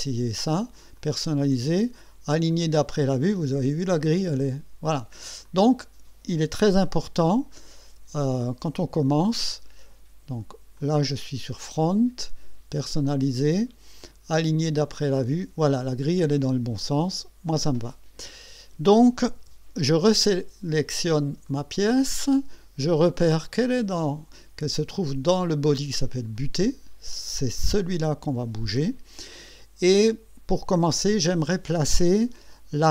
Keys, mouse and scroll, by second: 1.0 click, 2.5 click, 3.3-5.4 drag, 5.4 click, 6.8 KP_1, 10.8 click, 12.7 click, 14.8 click, 16.8-18.0 drag, 18.3-19.0 drag, 19.1 click, 19.4 KP_1, 20.8 click, 21.5 right click, 26.4 click, 30.0-31.0 drag, 31.2-31.7 scroll up 2, 31.8-32.5 right drag.